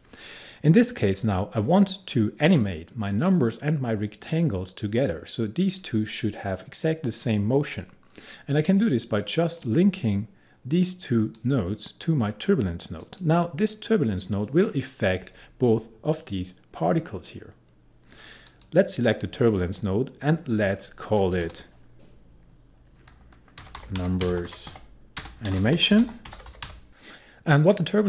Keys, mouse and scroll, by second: 8.7-13.0 drag, 18.5 click, 19.6-20.5 scroll down 1, 20.5 click, 21.4 Return, 23.4-27.2 typing, 26.9 click.